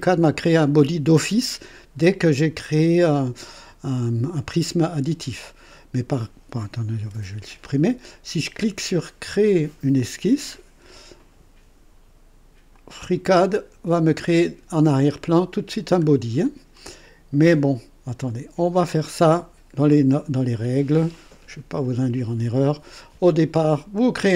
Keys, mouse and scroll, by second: 6.2 click, 7.0 Delete, 9.9 click, 12.7 click, 17.5 click, 18.2 click, 23.9 click.